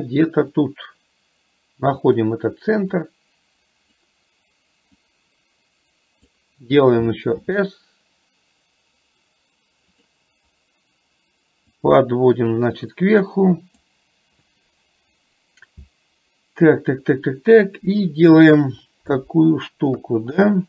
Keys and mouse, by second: 0.7-2.2 drag, 3.1-4.1 drag, 5.2-6.5 drag, 11.7-13.8 drag, 20.0 KP_1.